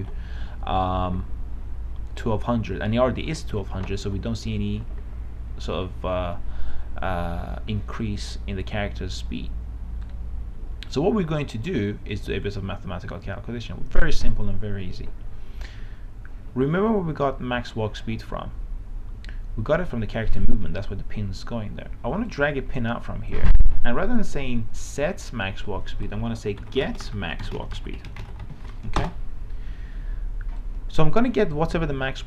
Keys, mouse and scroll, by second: 10.3-24.1 drag, 26.5-29.5 typing, 30.9-32.2 drag.